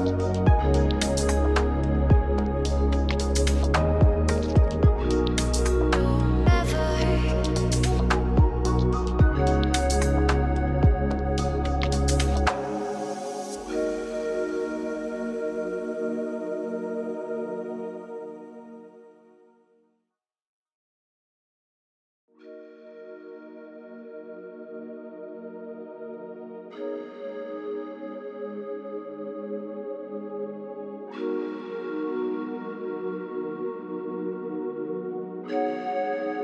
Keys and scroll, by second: 18.6 ctrl+space, 25.5 ctrl+space.